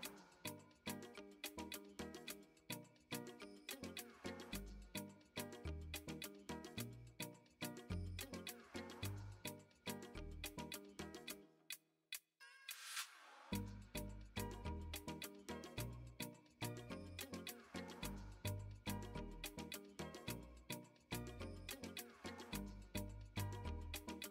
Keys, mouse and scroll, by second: 0.6 middle click, 1.8 shift+middle click, 3.3 middle click, 4.7 middle click, 6.4 2, 8.1 middle click, 10.9 ctrl+b, 19.3-20.5 middle drag, 21.1 middle click, 21.6 shift+middle click, 22.2 middle click, 23.7 ctrl+r.